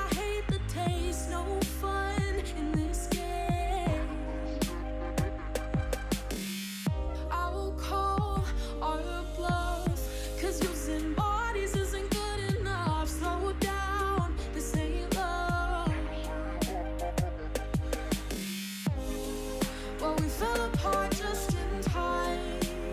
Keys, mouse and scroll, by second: 0.0 KP_7, 0.3 alt+z, 0.6-1.2 shift+middle drag, 1.2-1.7 scroll down 2, 1.7 shift+middle click, 1.9-3.3 scroll up 4, 3.8 s, 6.3 scroll down 5, 6.4 shift+middle click, 6.7-7.3 scroll up 4, 7.3-7.8 shift+middle drag, 7.8 scroll up 1, 7.9-9.0 shift+middle drag, 9.0 ', 9.7 ., 10.9 s, 13.1 scroll down 3, 13.3-14.3 shift+middle drag, 14.3-15.1 scroll up 2, 15.1 click, 15.4 click, 15.8 g, 17.2 shift+middle click, 17.6 ctrl+z, 17.9 shift+click, 18.5 g, 19.4-20.4 shift+middle drag, 20.4 click, 20.9 g, 22.1 scroll down 2, 22.2-22.9 middle drag.